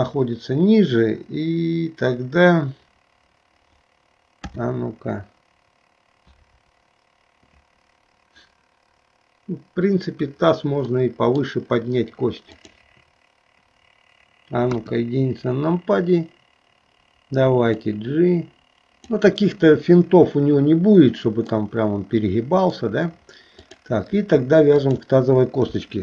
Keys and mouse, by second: 4.5 KP_3, 11.0 middle click, 12.5 click, 14.8 KP_1, 17.8 click, 18.0-19.1 drag, 21.6-23.0 middle drag, 23.7 click, 24.9 shift+click.